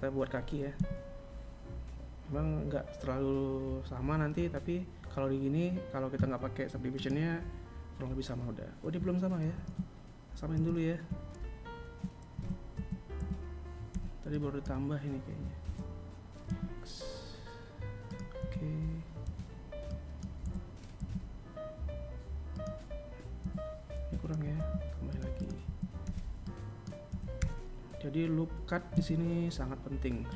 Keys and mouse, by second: 0.6 KP_1, 6.8 click, 9.3 r, 10.3 Tab, 12.1 a, 12.5 a, 13.0 z, 18.2 a, 19.0 b, 23.2 a, 24.2 r, 25.8 b.